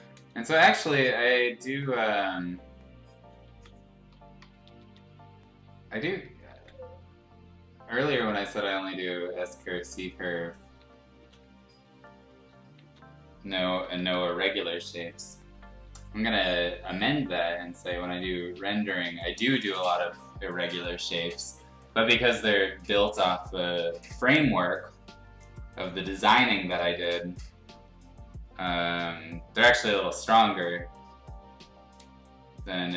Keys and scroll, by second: 1.2 ctrl+z, 3.5 ctrl+z, 4.4 [, 4.9 [, 6.5 ctrl+z, 10.8 ctrl+z, 11.3 x, 12.8-14.3 typing, 17.0 x.